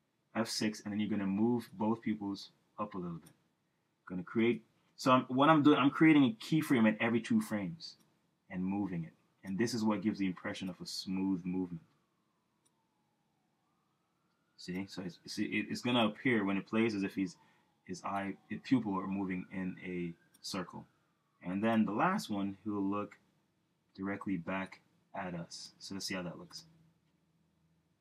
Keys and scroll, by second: 0.1 F6, 6.4 F6, 11.7 F6, 17.3 F6, 23.4 F6, 27.2 Return.